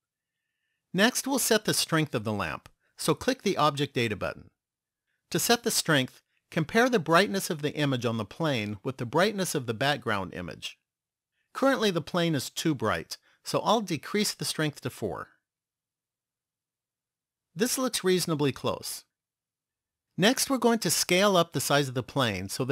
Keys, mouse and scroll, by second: 3.5 click, 14.1 click.